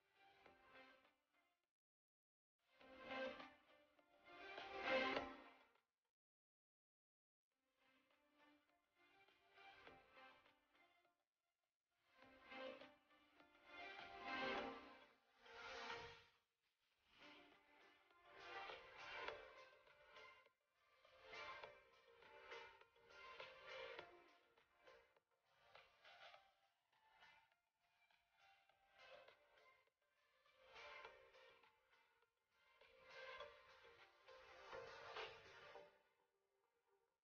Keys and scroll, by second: 1.6 shift+space, 4.7 ctrl+z, 19.9 ctrl+z, 27.7 ctrl+shift+[, 34.1 shift+space, 35.3 shift+space, 37.1 shift+space.